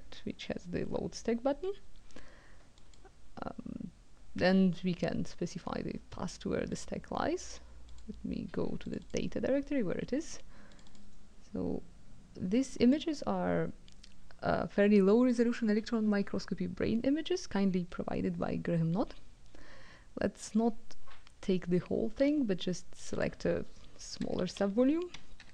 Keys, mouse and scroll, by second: 2.8 click, 6.7 click, 7.9 click, 8.8 click, 10.7 click, 12.8 click, 23.0 click, 24.2-25.5 typing.